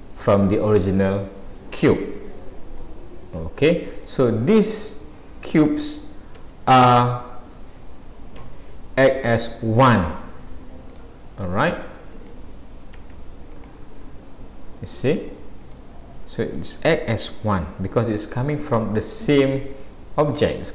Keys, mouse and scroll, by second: 2.8 middle click, 5.5 a, 6.4 Tab, 8.4 g, 12.1 click, 13.0 a, 13.6 click, 15.6 click, 16.8 click.